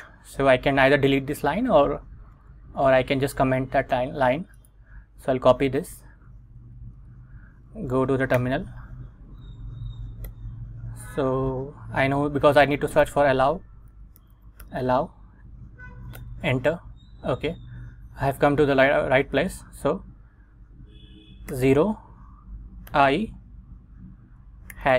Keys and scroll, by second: 6.4 super+Tab, 7.1 Return, 8.5 super+v, 9.4 Up, 10.4 Return, 13.1-15.4 typing, 16.3 Return, 21.6 0, 23.0 i, 24.8 shift+3.